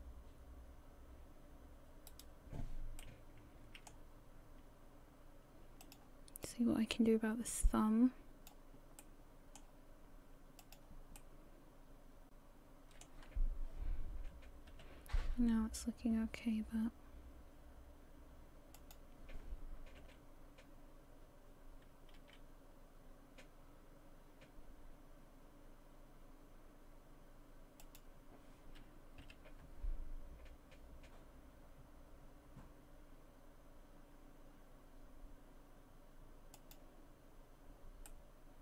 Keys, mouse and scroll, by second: 3.0 middle click, 4.2-5.8 scroll down 1, 5.8 click, 6.4 click, 9.0 middle click, 10.6 click, 11.2 middle click, 14.7 g, 20.0 r, 29.2 g, 37.3-38.1 scroll down 3, 38.1 middle click.